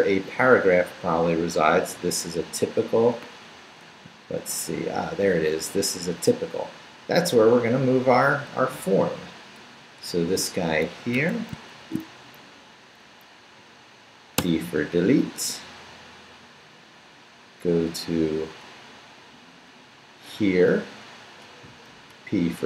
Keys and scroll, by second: 4.4 Down, 8.5 Up, 11.1 Escape, 11.8 shift+v, 12.0 shift+Down, 12.9 Down, 13.4 Down, 14.4 d, 14.9 Down, 17.9 Up, 19.5 Up, 22.1 p.